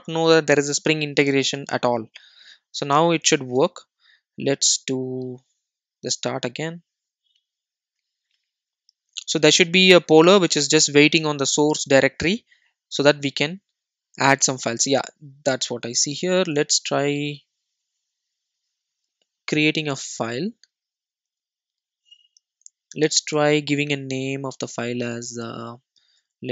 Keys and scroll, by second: 16.3 super+n.